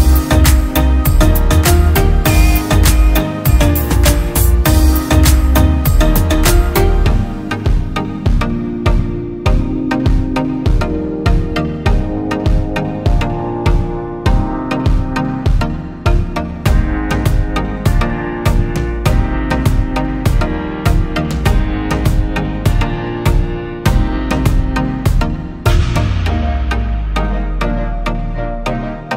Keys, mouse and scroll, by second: 6.6 typing, 8.4-10.7 typing, 9.8 double click, 11.4 double click, 12.5 typing, 14.4 typing, 14.9 double click, 16.1 typing, 16.7 double click.